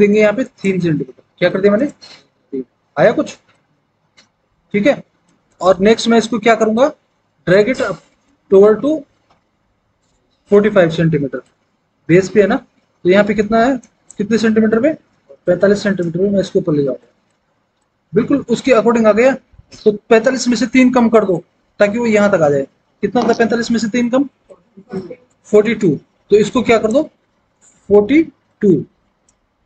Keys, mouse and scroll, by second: 1.4 KP_3, 1.7 Return, 15.1 KP_4, 15.3 KP_5, 15.7 Return, 27.8 KP_4, 28.4 KP_2, 28.9 Return.